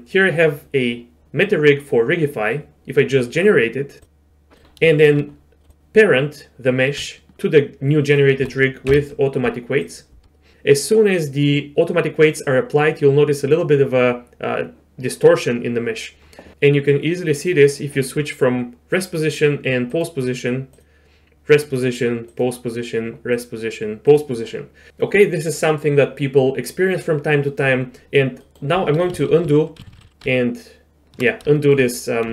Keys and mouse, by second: 4.0 click, 4.9 shift+drag, 8.1 shift+click, 8.9 ctrl+p, 19.9 click, 21.5-22.4 drag, 23.4-24.2 drag, 28.4 middle click, 29.1 ctrl+z, 29.2 ctrl+z, 29.4 ctrl+z, 29.5-30.0 ctrl+z, 30.3 ctrl+z, 31.6 shift+drag.